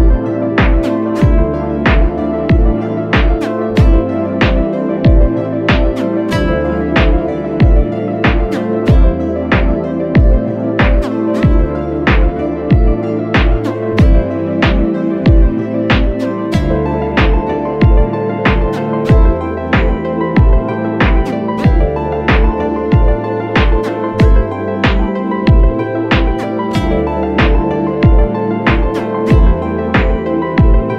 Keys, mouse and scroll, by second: 1.9 ctrl+h, 7.4 alt+shift+click, 12.1 Return, 12.5 Left, 13.5 click, 13.8 click, 14.6 click, 14.8 Left, 16.3 Right, 24.4 typing, 25.9 click, 26.9-27.4 [.